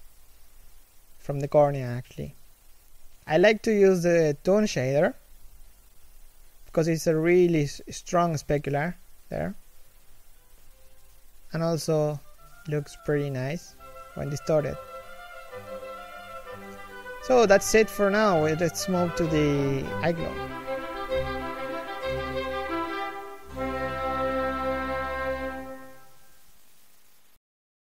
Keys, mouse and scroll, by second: 14.7 scroll down 1, 14.8 1.